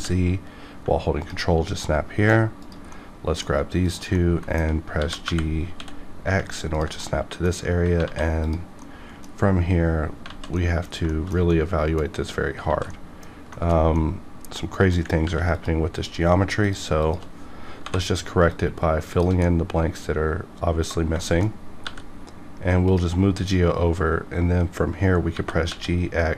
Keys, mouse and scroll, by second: 1.2 ctrl+click, 1.5 scroll down 1, 1.8 middle click, 2.6 click, 3.2 middle click, 3.8 shift+click, 4.4 alt+middle click, 4.9 g, 5.2 y, 5.7 x, 6.3 x, 6.7 ctrl+click, 7.0 middle click, 8.0 alt+z, 8.4 click, 8.8-10.2 middle drag, 10.2 alt+z, 10.5 middle click, 11.5 middle click, 12.6 alt+z, 12.9 middle click, 13.0 middle click, 13.5 shift+middle click, 13.7 shift+middle click, 13.9 middle click, 14.7 middle click, 15.2 ctrl+r, 15.5 click, 16.9 shift+click, 17.8 j, 18.4 click, 18.5 click, 19.0 shift+click, 19.4-21.2 middle drag, 21.2 shift+middle click, 21.8 g, 22.9 click, 25.3 g, 25.7 x.